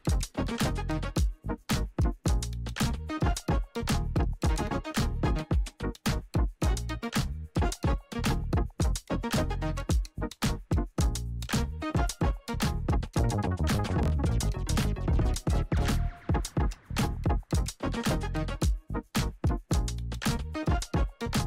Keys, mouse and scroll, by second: 7.2-7.8 alt+scroll up 1, 7.9 space, 8.1 click, 8.7 space, 9.2-9.7 alt+scroll up 1, 10.6 click, 14.8-16.2 scroll down 1, 16.5-21.4 drag.